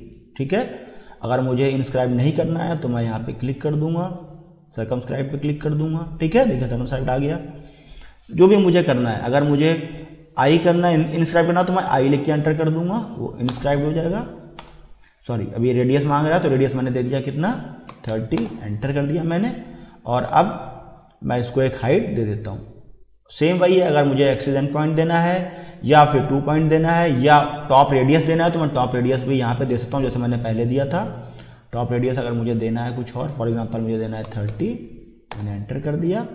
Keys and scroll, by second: 11.9 shift+i, 13.5 Return, 14.6 BackSpace, 17.7-18.6 typing, 34.0-35.0 typing, 35.3 Return.